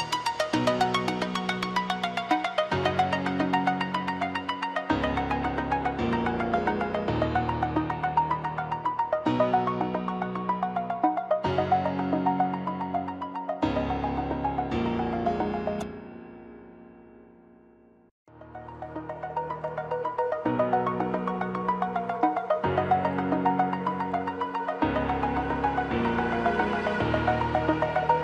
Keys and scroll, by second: 1.1 ctrl+z, 1.8 ctrl+z.